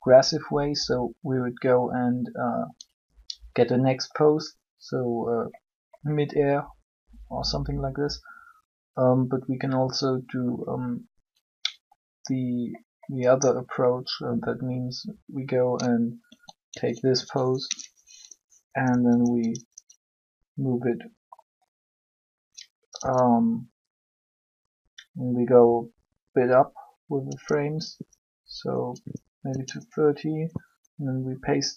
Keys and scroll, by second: 16.1 a, 16.6 a, 18.8 Up, 22.6 Up.